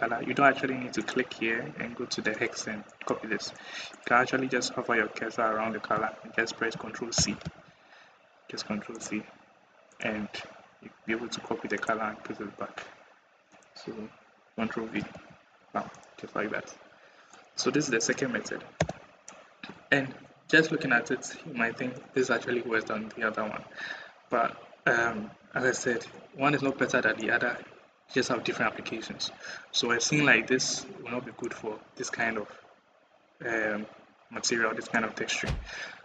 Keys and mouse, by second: 0.8 click, 7.0 ctrl+c, 7.2 ctrl+c, 11.6 click, 14.8 ctrl+v, 18.6 /, 20.8 middle click, 24.1-25.3 middle drag, 29.8 middle click, 30.9 middle click.